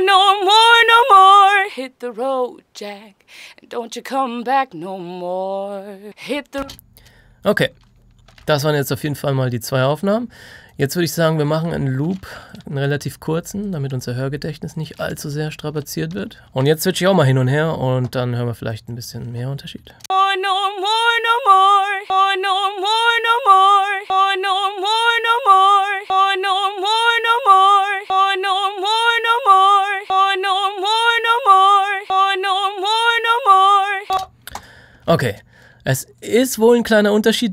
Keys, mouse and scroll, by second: 6.5 space, 7.4 click, 8.3 F3, 10.1 click, 12.4 ctrl+click, 15.7 alt+click, 16.4 space, 17.1 click, 19.9 space, 21.9 click, 34.1 space, 34.5 click.